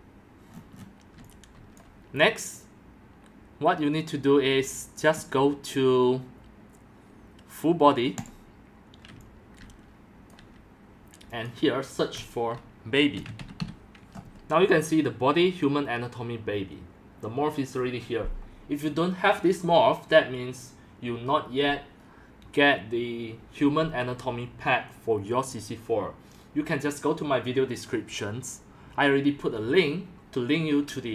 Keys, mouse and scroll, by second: 1.1 x, 1.8 click, 3.5-6.8 drag, 4.6-5.3 typing, 8.1-8.9 drag, 9.1-13.1 drag, 9.1 x, 9.7 c, 10.3 c, 12.9-14.1 typing, 13.7-16.5 drag, 16.5 typing.